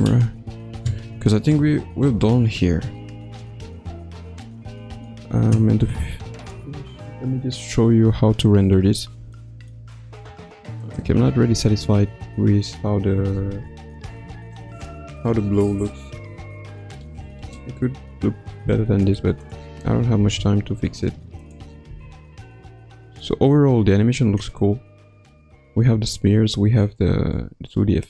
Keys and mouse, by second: 9.3 shift+middle click, 11.2-19.9 drag, 20.5 ctrl+s, 21.4 click, 21.9 space.